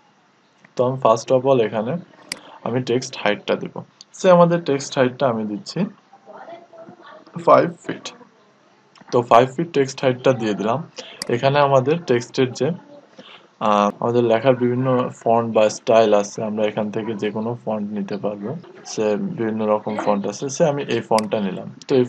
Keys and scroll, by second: 6.0-6.8 typing.